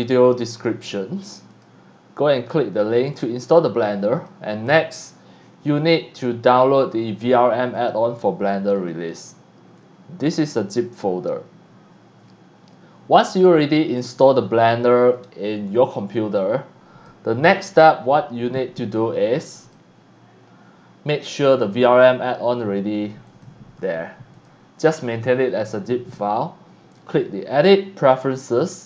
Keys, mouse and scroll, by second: 0.4-1.0 scroll up 2, 1.5 click, 3.1-4.3 drag, 4.6 click, 7.7-8.8 drag, 9.1 click, 9.7-11.3 drag, 13.2 click, 14.4 middle click, 15.1 click, 16.0-17.1 drag, 17.7 click, 19.6 click, 23.2 click, 24.3 click, 27.0 click, 28.4 click.